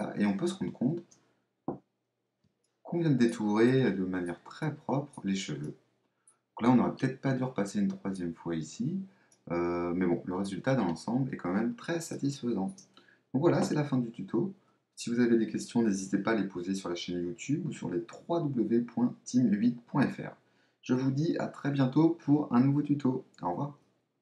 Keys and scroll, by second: 1.6 super++, 13.5 super+-.